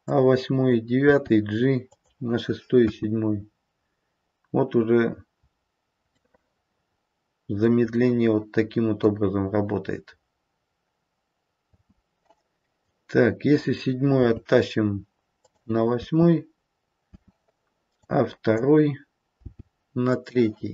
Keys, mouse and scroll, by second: 1.0 g, 2.8 space, 6.2 middle click, 7.5 middle click, 11.6 space, 12.8 click, 14.2 g, 17.1 space, 17.9 click, 19.4 g.